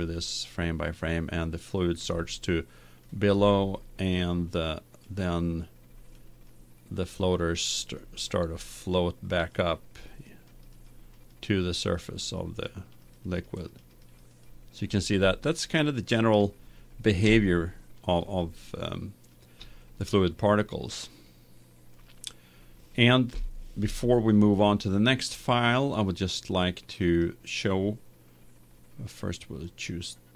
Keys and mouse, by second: 0.2-3.8 drag, 6.6-16.0 drag, 16.0-18.5 middle drag, 21.1-23.9 middle drag, 23.3 KP_1, 27.1-28.9 right drag, 29.8-30.3 right drag.